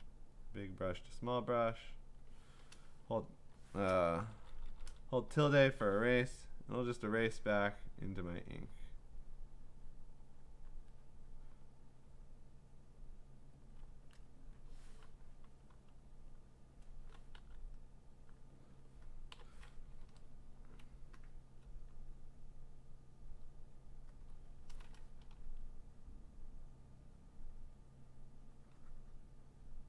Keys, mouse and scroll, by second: 0.8 click, 1.8 click, 2.1 click, 3.1 [, 6.3-14.3 typing, 10.4 click, 11.5 click, 15.7 b, 16.5 click, 17.4 g, 17.8 click, 19.3 b, 21.3 alt+click, 23.3 click, 24.2 alt+click, 25.1 click, 25.2 click, 25.3 alt+click, 25.3 ], 25.4 click.